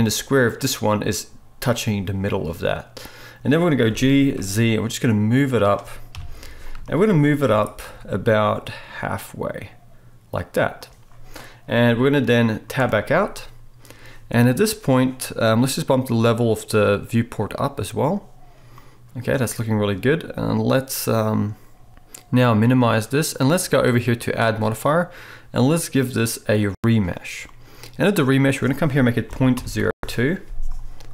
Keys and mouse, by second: 3.1 middle click, 3.5-17.5 right drag, 3.9 g, 6.1 KP_3, 7.4 g, 12.8 Tab, 17.5-31.1 middle drag.